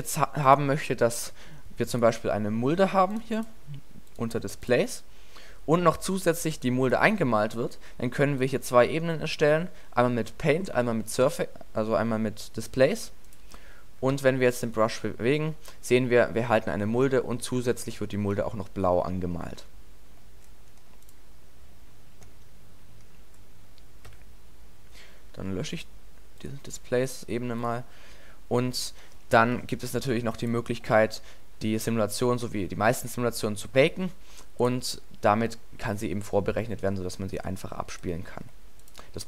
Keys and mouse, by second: 2.5-3.6 drag, 7.8-13.1 drag, 13.1-13.8 middle drag, 14.2 alt+a, 16.8 middle drag, 17.0 alt+a, 17.6-18.5 middle drag, 18.6-19.6 middle drag, 22.8-25.7 middle drag, 24.1 a, 34.5-34.8 middle drag, 37.4 middle click, 38.4-39.2 middle drag.